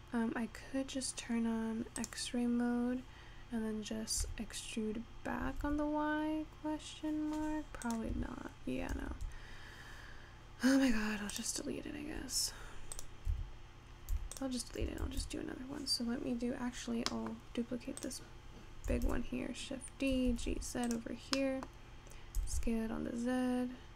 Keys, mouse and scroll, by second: 0.3 scroll up 2, 1.0-2.1 scroll down 14, 2.1-4.2 drag, 4.2 e, 8.1 Escape, 9.2 ctrl+z, 10.0-11.4 scroll down 2, 11.4 click, 11.8-13.0 scroll down 2, 13.0 click, 13.4 Tab, 14.1 x, 15.0 shift+a, 17.0 scroll up 1, 17.1-18.2 middle drag, 18.2 click, 19.0 shift+d, 21.2 scroll down 3, 21.4 middle click, 22.3 scroll up 5, 22.4 s.